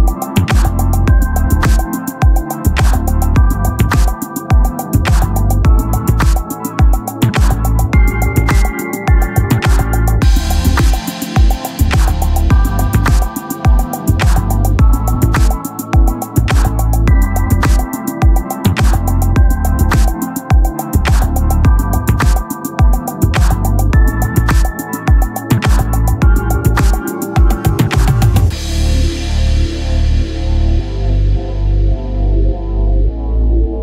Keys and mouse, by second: 0.5 ctrl+z, 4.5 click, 13.7 click, 16.3 click, 19.3 click, 23.5 click, 29.5 click, 32.6 click.